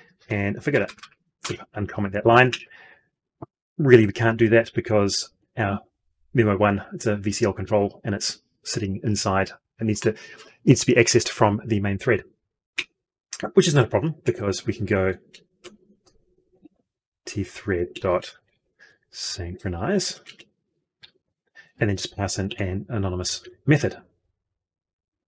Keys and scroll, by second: 16.5 ctrl+space.